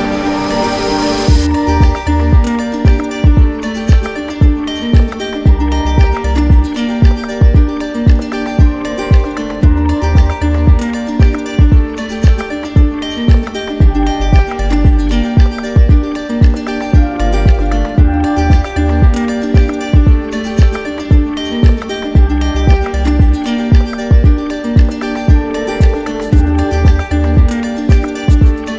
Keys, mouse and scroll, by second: 1.3-1.8 scroll, 1.8 click, 4.5 click, 5.4 click, 5.7 right click, 5.7 z, 7.9 click, 10.5 click, 12.9 click, 15.9 ctrl+click, 16.0 ctrl+z, 18.6 ctrl+click, 19.5 right click, 20.7 click, 22.5 ctrl+click, 23.7 ctrl+click, 23.8 click, 24.8 click, 26.6 click.